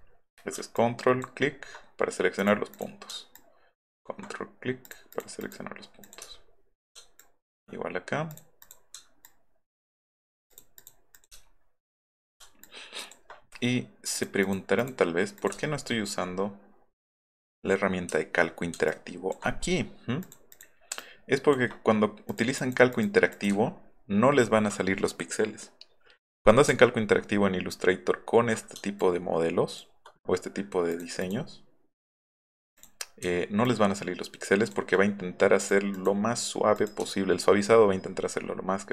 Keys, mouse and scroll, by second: 0.3 alt+middle click, 0.7 ctrl+click, 2.4 ctrl+click, 2.7 click, 3.3 shift+click, 4.8 click, 5.1 click, 5.4 click, 6.0 click, 6.4 alt+middle drag, 6.6 alt+middle click, 7.2 shift+click, 8.3 click, 8.6 click, 9.2 ctrl+click, 10.5 click, 11.4 alt+middle click, 11.4-11.9 alt+scroll up 4, 11.8 alt+middle click, 12.6 ctrl+click, 14.1 click, 14.4 click, 14.7 click, 15.4 click, 15.7 alt+middle click, 16.0 alt+middle click, 16.5 alt+middle drag, 16.8-17.6 alt+scroll up 3, 18.2 alt+middle click, 18.9 ctrl+click, 20.2 click, 20.5 click, 21.0 ctrl+click, 22.3 click, 22.6 click, 22.9 click, 23.3 click, 23.7 alt+middle click, 24.0 alt+middle click, 24.3 alt+middle click, 26.8-27.8 alt+middle drag, 29.0 ctrl+click, 30.9 click, 31.2 click, 32.8 drag, 33.7-34.7 ctrl+drag, 35.6 click, 35.9 click, 36.7 click, 37.2 alt+middle click, 37.4 alt+middle click, 37.8-38.2 alt+middle drag, 38.7 alt+middle drag.